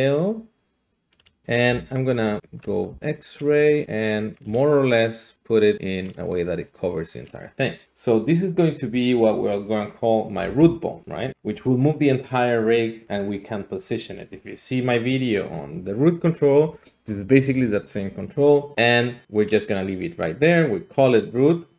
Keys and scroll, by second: 1.7 alt+z, 2.4 alt+z, 2.9 s, 10.4 F2, 11.3 Return, 11.3 typing.